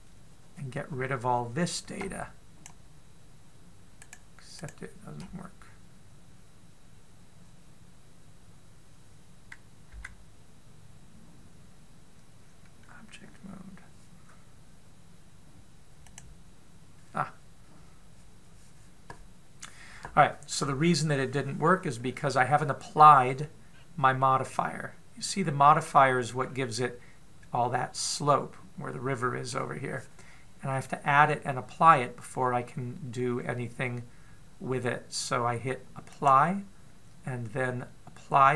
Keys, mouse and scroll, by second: 4.8 right click, 5.4 right click, 10.9 Tab, 16.8 click, 22.4-22.8 scroll down 2, 22.8-24.5 scroll up 1, 24.5-25.0 scroll down 1, 25.0 middle click, 25.0-25.6 scroll down 1, 27.3 scroll up 3, 27.4 middle click, 36.9 click.